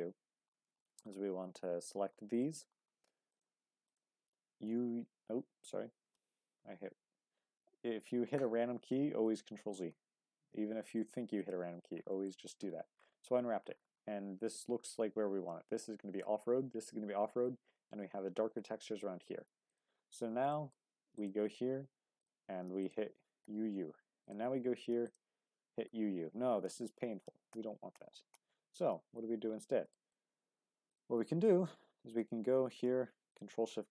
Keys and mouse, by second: 0.0-0.7 drag, 0.0 u, 0.8 shift+drag, 1.2 Tab, 2.4 shift+click, 4.6 y, 6.1 ctrl+z, 9.8 u, 12.3 shift+middle click, 20.5 shift+middle click, 21.1 ctrl+click, 22.2 click, 22.8 ctrl+click, 23.4 u, 23.6 u, 25.0 ctrl+click, 26.0 u, 27.2 ctrl+z, 29.9 shift+middle click, 30.8 click, 32.1 click, 33.3 ctrl+shift+click.